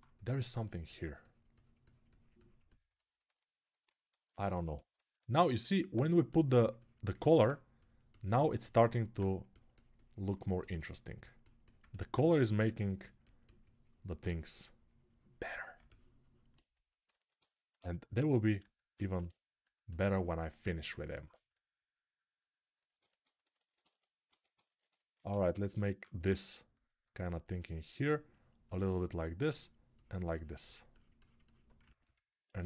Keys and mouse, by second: 8.7-10.3 alt+right drag, 10.3-11.5 drag, 11.5-14.7 alt+right drag, 14.7-17.0 drag, 18.4 alt+q, 23.1-24.6 alt+shift+right drag, 24.1 alt+q, 24.6-31.5 alt+shift+drag.